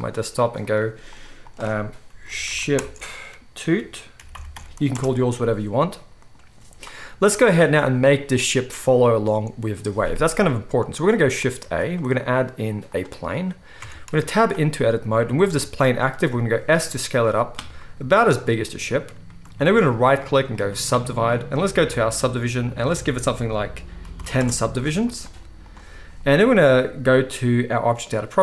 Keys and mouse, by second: 10.8-11.2 drag, 10.8-11.2 middle drag, 10.8-11.2 right drag, 11.3 drag, 11.3 middle drag, 11.3 right drag, 11.6 shift+a, 14.0 Tab, 14.1-14.6 middle drag, 14.1 z, 16.0 s, 17.2 click, 17.7-19.4 middle drag, 19.4-21.8 shift+right drag, 21.9 click, 21.9 middle click, 21.9 right click.